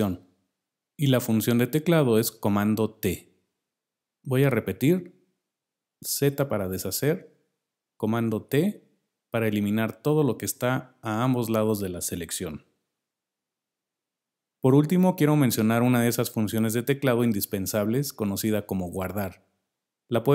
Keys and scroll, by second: 6.5 z, 8.7 super+t, 13.4 super+t.